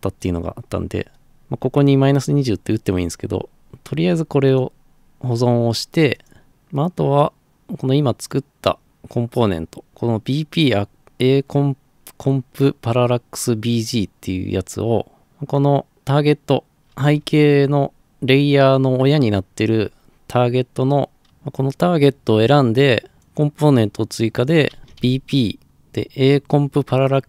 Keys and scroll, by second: 24.6-25.5 typing.